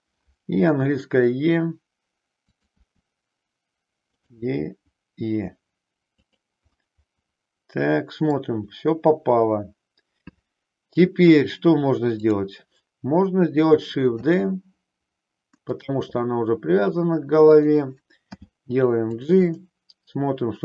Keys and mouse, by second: 0.7 e, 2.6 click, 2.8 e, 6.3 click, 6.7-8.4 middle drag, 14.2 shift+d, 16.2 middle click, 17.4 click, 18.2 g, 19.6-20.6 middle drag.